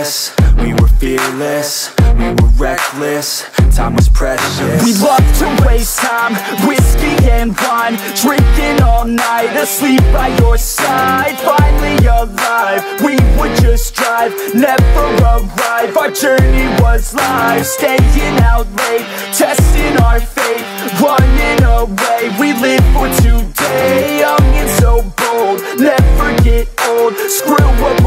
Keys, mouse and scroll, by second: 0.7 ctrl+-, 2.6-8.7 drag, 8.7 ctrl+=, 11.2 ctrl+=, 15.3-28.0 drag.